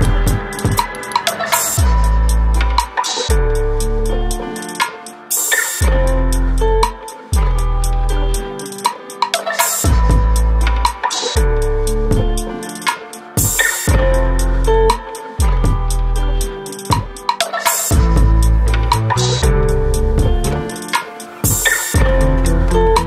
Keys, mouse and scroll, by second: 0.5 click, 1.2 click, 2.7 click, 4.7 click, 5.1 click, 5.7 typing, 6.3 middle click, 7.0-7.6 scroll up 3, 7.4 middle click, 11.0 click, 11.9 Delete, 14.2 click, 14.9 click, 16.6 click, 17.8 click, 18.5 Delete, 19.6 n, 20.2 middle click, 21.3 click, 21.3 typing, 21.7 middle click, 22.1-22.5 scroll up 1.